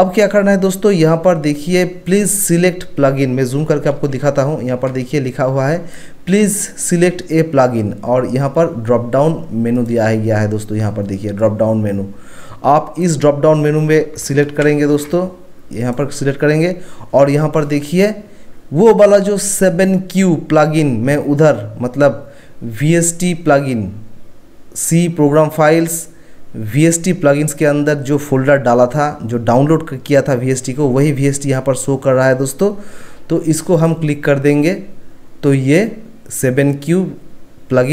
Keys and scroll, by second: 4.0 ctrl+1, 14.6 ctrl+1.